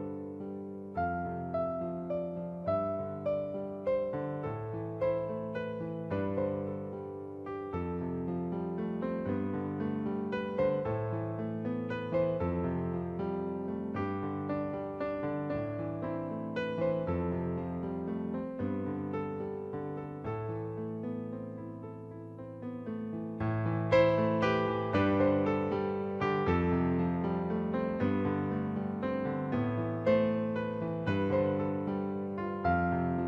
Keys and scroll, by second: 0.1-0.9 typing, 2.7 ctrl+alt+z, 3.1 space, 6.0 ctrl+u, 13.6 ctrl+z, 18.6 space, 22.4 b, 29.1 ctrl+a, 29.7 ctrl+d.